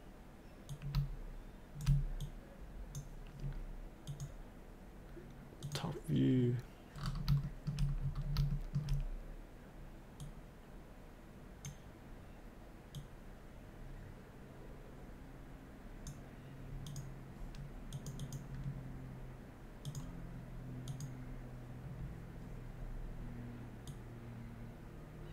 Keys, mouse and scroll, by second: 0.7 click, 2.2-3.7 drag, 6.9-7.2 scroll down 1, 7.4 shift+middle click, 8.0-8.3 scroll down 1, 8.5 shift+middle click, 10.2-11.9 drag, 13.0-18.2 drag, 22.7-23.8 scroll up 1, 23.8-25.3 drag.